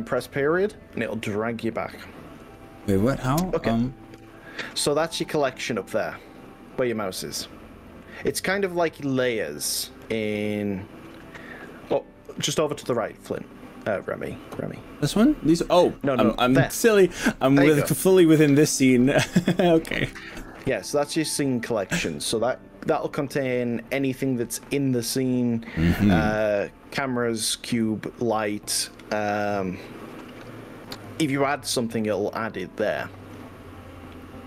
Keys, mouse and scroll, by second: 30.3-31.7 middle drag, 31.7-32.6 scroll down 5, 32.9-33.9 middle drag, 34.1-34.4 middle drag.